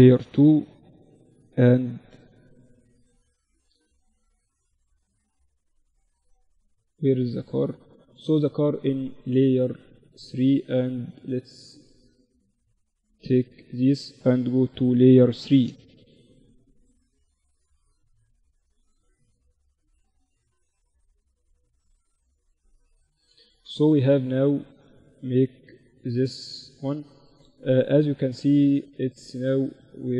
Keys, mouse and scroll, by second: 0.7-2.5 drag, 1.8 z, 3.8-5.8 middle drag, 5.8-7.7 drag, 6.8 z, 8.7-10.5 right drag, 9.9-11.9 drag, 10.5 a, 10.8 a, 11.9 b, 13.7 m, 15.9-17.9 drag, 17.9-20.6 drag, 19.2 ctrl+z, 20.6-22.1 right drag, 22.1-28.1 middle drag, 22.5 z, 22.5 z, 26.4-28.7 right drag, 28.1-29.9 drag, 29.3 middle click, 29.3-30.1 right drag.